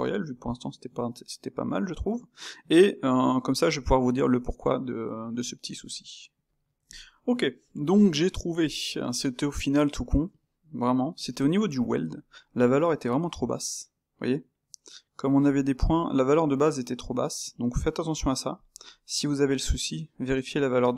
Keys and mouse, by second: 7.3-11.5 middle drag, 18.7-20.9 middle drag.